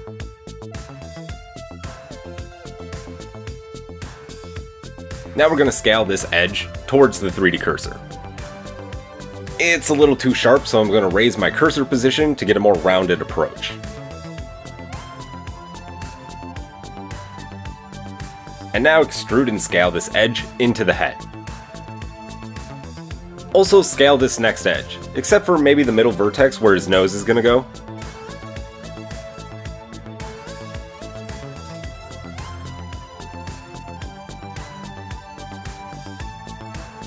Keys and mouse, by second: 1.0 shift+middle click, 1.6-5.3 shift+middle drag, 5.4-11.6 alt+shift+middle drag, 6.9 s, 9.1 KP_1, 11.6-18.6 shift+drag, 16.9 e, 18.6-20.1 middle drag, 23.8 alt+click, 25.8 shift+click, 32.9 s, 35.7 Tab.